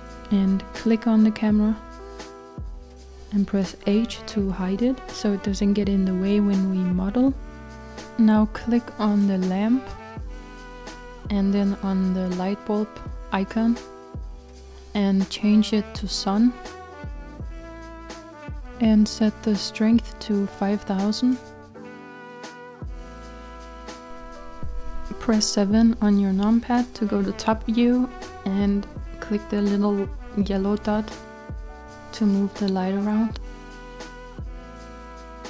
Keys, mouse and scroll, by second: 0.2 scroll down 4, 0.9-1.2 scroll down 1, 1.2-2.9 middle drag, 2.9 click, 7.4 h, 9.2 click, 11.4-16.7 shift+middle drag, 16.7 click, 23.4-28.2 drag, 28.2 KP_7, 30.5 click.